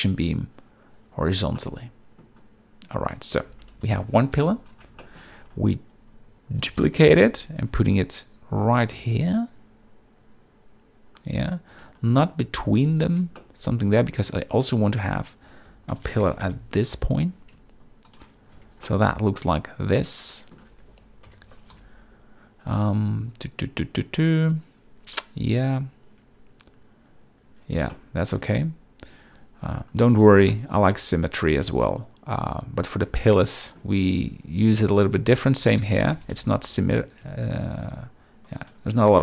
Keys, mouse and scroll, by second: 1.6-2.2 middle drag, 3.8 KP_7, 4.3 z, 5.0 shift+middle drag, 6.6 shift+d, 7.0 g, 7.2 y, 13.4-13.9 shift+middle drag, 15.9 shift+d, 16.0 shift+right click, 16.2 g, 16.4 y, 18.5 z, 18.8-20.5 middle drag, 21.3 KP_7, 21.7 z, 27.9 shift+middle click, 30.5 shift+middle click, 33.4-33.8 shift+middle drag, 34.8 shift+middle drag, 35.8 shift+d, 35.9 right click, 36.1 g, 36.3 y, 38.6 shift+click.